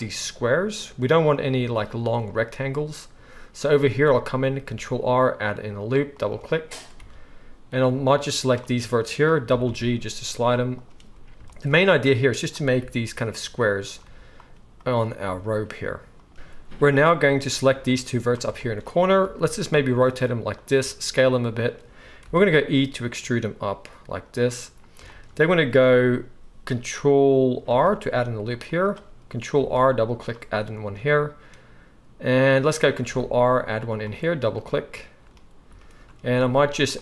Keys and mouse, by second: 4.6 ctrl+r, 6.9 alt+a, 8.7-10.8 drag, 9.4 g, 10.8-12.0 middle drag, 12.0-13.3 drag, 12.8 g, 13.3 middle click, 13.6 click, 14.0 g, 14.5 middle click, 14.8-16.3 drag, 15.2 g, 16.3-17.9 middle drag, 17.9-20.6 drag, 19.2 r, 20.6-37.0 middle drag, 20.8 s, 22.2 e, 27.7 ctrl+r, 29.5 ctrl+r, 33.0 ctrl+r, 36.3 ctrl+r.